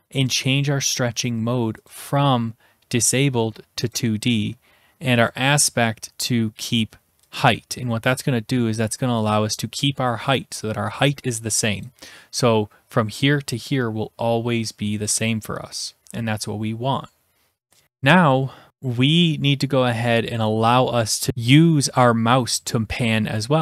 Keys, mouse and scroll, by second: 0.1 scroll down 1, 1.9 click, 3.9 click, 5.3 click, 5.8 click, 7.3-8.4 drag, 11.9-12.9 drag.